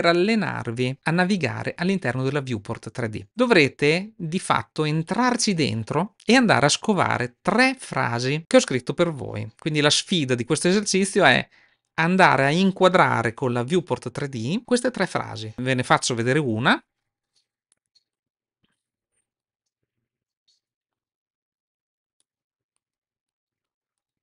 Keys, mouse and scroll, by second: 3.6-4.9 middle drag, 17.6 middle click, 19.1 shift+middle click, 19.4-20.8 middle drag, 22.0-22.6 middle drag.